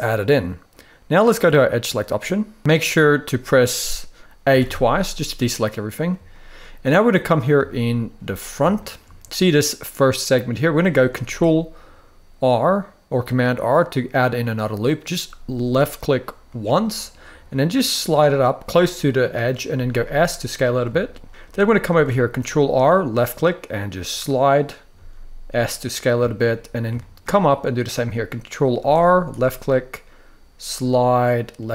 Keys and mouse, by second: 4.2 a, 4.3 a, 6.1 shift+middle click, 7.4-7.9 shift+middle drag, 8.5 shift+middle drag, 10.9 ctrl+r, 18.7 click, 19.4 s, 20.1 click, 20.6 shift+middle click, 21.6 ctrl+r, 24.1 click, 24.6 s, 25.6 click, 25.9 shift+middle click, 26.7 shift+middle click, 28.5 ctrl+r, 31.4 click.